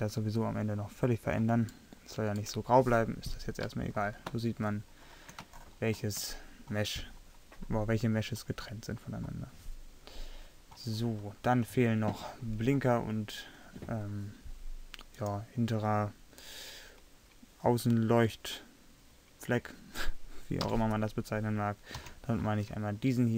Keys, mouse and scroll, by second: 4.0 middle click, 11.1-15.2 middle drag, 20.7 KP_3, 22.0 z.